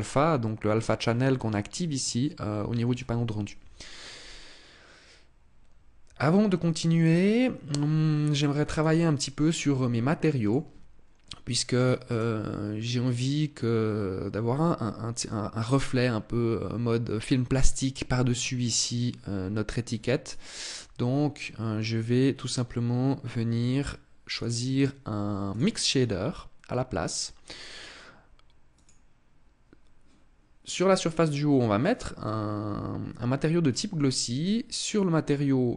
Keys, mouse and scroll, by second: 8.3 right click, 10.0 click, 11.3 right click, 11.6 right click, 19.8 right click, 23.9 click, 27.3 click, 34.4 click.